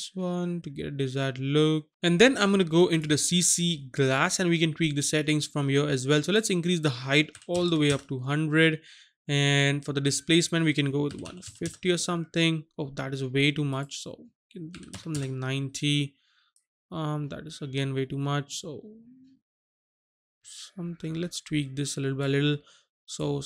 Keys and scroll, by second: 7.4 KP_1, 7.6 KP_0, 7.9 Return, 11.1 KP_1, 11.3 KP_5, 11.4 KP_0, 11.6 Return, 14.8 KP_9, 14.9 KP_0, 15.1 Return.